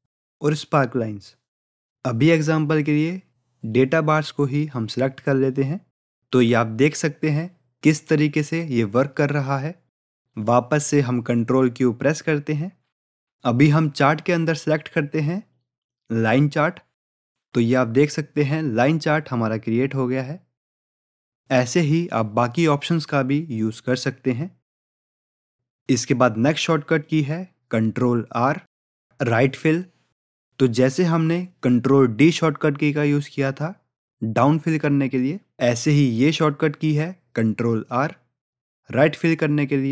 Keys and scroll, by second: 10.8 ctrl+q, 21.4 ctrl+q.